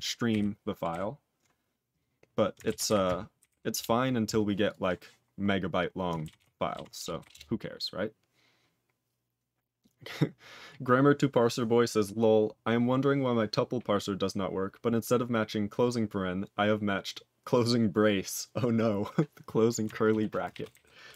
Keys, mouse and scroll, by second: 0.8 ctrl+g, 3.7 ctrl+Return, 4.6 click, 5.4-5.8 scroll down 1, 5.8-6.3 scroll up 4, 6.3 ctrl+s, 7.3 Return, 20.0 ctrl+a, 20.4 ctrl+space, 20.5 ctrl+e, 20.7 ctrl+g.